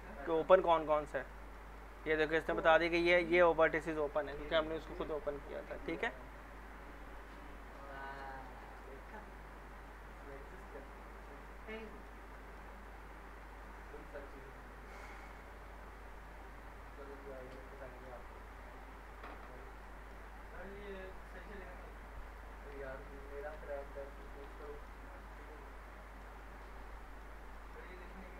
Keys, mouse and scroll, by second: 0.0 scroll down 1, 0.6-1.2 alt+middle click, 2.1 scroll up 1, 2.5-3.1 alt+middle click, 3.0 scroll up 1, 3.4 middle click, 7.0 click, 7.4 scroll down 1, 7.9 middle click, 8.3 middle click, 8.8-9.5 alt+middle click, 9.4 scroll up 1, 9.8-10.5 middle click, 14.1 scroll down 1, 17.3 click, 17.8 alt+middle click, 19.1 click, 19.8 alt+middle click, 20.4-22.1 scroll up 1, 22.3 click, 24.2 ctrl+shift+e, 24.6 middle click, 25.0 scroll up 1, 25.3-26.3 alt+middle click, 26.7 scroll down 1, 26.9 alt+middle click, 27.7-28.3 scroll up 1.